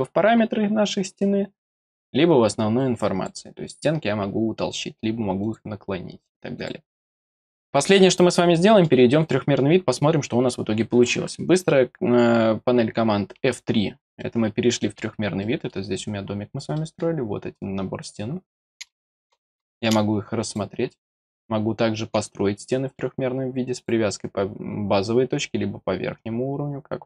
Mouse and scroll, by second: 1.6 click, 2.8 click, 5.4 click, 6.5 click, 7.4 middle click, 8.5 middle click, 14.2 middle click, 15.0-15.4 scroll down 2, 15.4 middle click, 15.9-16.5 scroll down 4, 16.7 middle click, 17.5 scroll up 2, 17.8 scroll down 1, 18.8 middle click, 20.4 click, 23.7 click.